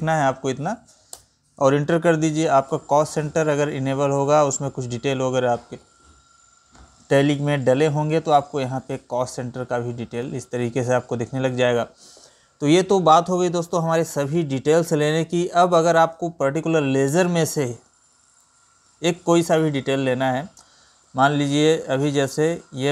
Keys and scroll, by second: 2.3 Right, 3.9 Down, 4.7 Left, 20.6 Up, 21.9 ctrl+n, 22.2 Up, 22.7 Up.